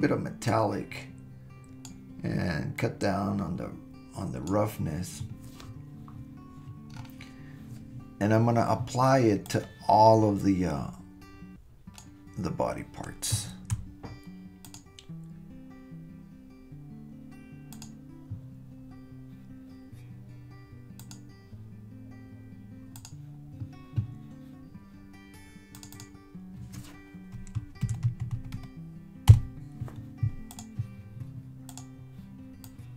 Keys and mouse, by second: 0.5-1.9 right drag, 2.8-4.5 right drag, 9.6-12.1 right drag, 14.8-17.9 right drag, 21.1-23.1 drag, 25.8 click, 26.0-29.9 drag, 30.5 click.